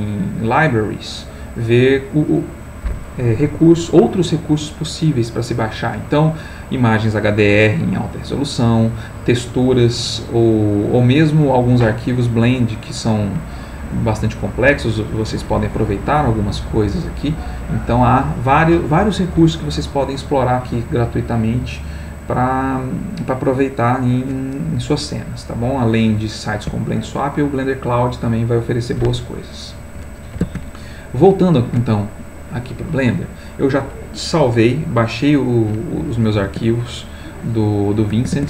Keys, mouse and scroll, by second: 14.3 click, 22.2-22.9 scroll down 1, 23.2-23.8 scroll down 1, 24.0-24.4 scroll down 1, 26.2-29.9 drag, 30.7 alt+Tab, 36.8 alt+Tab, 38.0 alt+Tab.